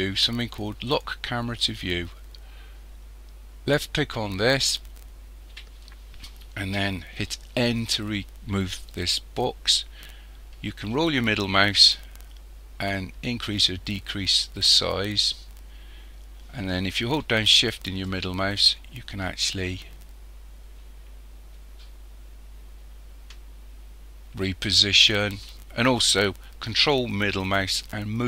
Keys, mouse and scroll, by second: 3.8 click, 7.6 n, 10.9-12.3 scroll down 3, 12.3 scroll down 1, 12.8-13.7 scroll down 1, 13.7-14.1 scroll up 3, 14.5-15.1 scroll down 2, 15.1-16.1 scroll up 1, 16.1 scroll down 1, 18.1-21.1 shift+middle drag, 27.4-28.2 ctrl+middle drag.